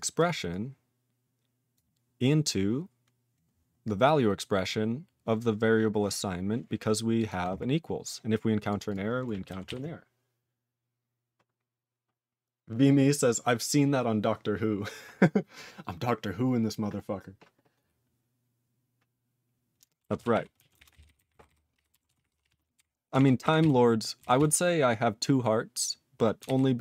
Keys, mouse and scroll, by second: 0.0 click, 0.1 click, 0.5 click, 1.7 click, 4.0 click, 4.7 click, 5.3-7.1 scroll up 3, 7.1 click, 7.2 click, 7.6-8.2 scroll down 3, 8.5 click, 8.8 click, 8.8 click, 8.9 click, 9.6 ctrl+s, 20.1 ctrl+s, 20.3 ctrl+e, 20.5 ctrl+a, 20.7 ctrl+space, 20.7 ctrl+e, 20.9 ctrl+n, 21.0 ctrl+n, 21.1 ctrl+g, 21.1 ctrl+n, 21.2 ctrl+e, 21.3 ctrl+n, 21.4 ctrl+n, 21.7 ctrl+p, 22.0 ctrl+s, 22.1 ctrl+p, 22.3 ctrl+p, 22.4 ctrl+p, 22.4 ctrl+e, 22.7 ctrl+b, 23.1 ctrl+alt+f, 23.6 ctrl+s, 24.3 ctrl+s, 26.4 ctrl+alt+b.